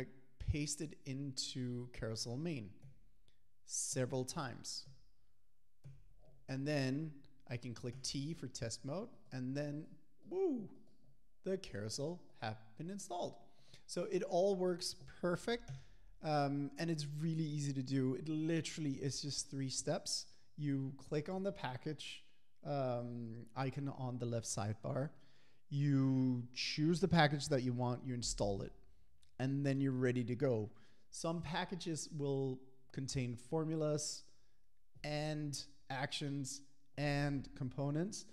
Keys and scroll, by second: 2.9 super+v, 4.0 super+v.